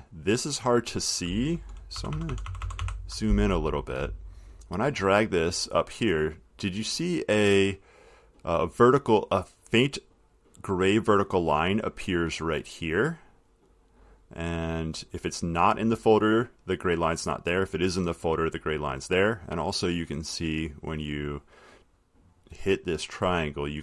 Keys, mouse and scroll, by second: 1.4 click, 2.2 ctrl+=, 11.7 click, 15.2 click, 18.1 click, 20.2 click, 20.4-22.7 drag.